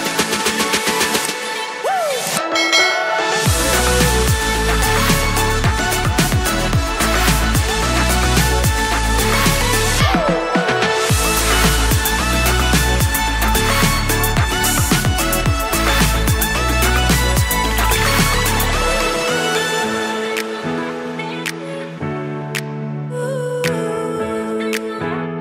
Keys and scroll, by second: 23.8 super+s.